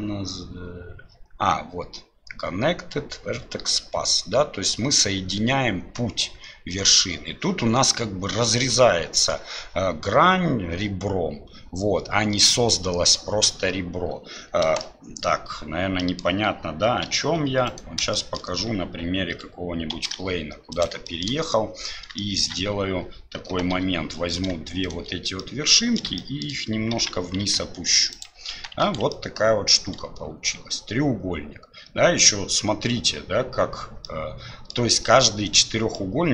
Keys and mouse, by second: 14.8 click, 16.0 click, 18.1 shift+click, 20.0 shift+d, 21.2 shift+click, 22.3 shift+click, 23.8 1, 25.4 middle click, 26.2 shift+middle click, 28.9 shift+z, 29.3-32.2 middle drag, 34.2 middle click, 36.1-36.3 middle drag.